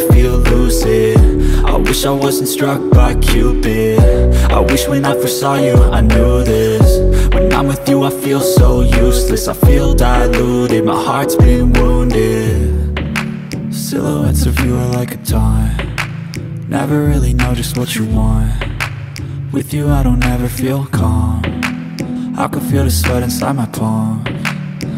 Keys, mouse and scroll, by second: 1.9 click, 5.0 space, 5.2 click, 5.4 space, 6.2-8.5 drag, 9.2 space, 11.3 ctrl+z, 11.8 click, 12.4 alt+scroll up 1, 12.7 space, 12.8 click, 13.1 space, 14.4 click, 16.5-22.5 drag, 24.0 alt+scroll down 1, 24.7-24.9 drag.